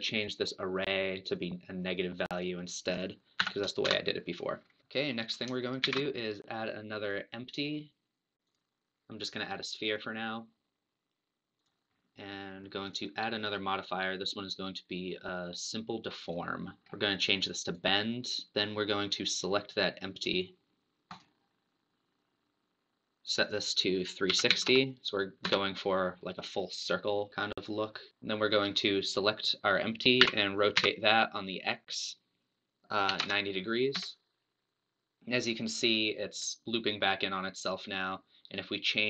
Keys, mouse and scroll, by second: 0.3 click, 1.3-4.1 drag, 4.8-5.8 middle drag, 5.8 shift+a, 11.7 click, 12.8 click, 16.3 click, 16.9 scroll down 4, 17.7 click, 19.3-22.3 drag, 23.4-26.4 drag, 28.1 click, 29.0 click, 30.2 r.